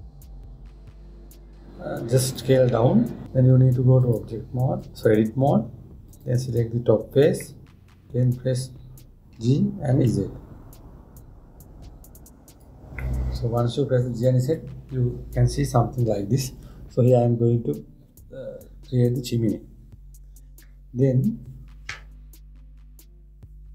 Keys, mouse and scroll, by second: 0.3 s, 4.7-6.9 drag, 8.2-10.1 middle drag, 10.1 g, 13.7-16.8 middle drag.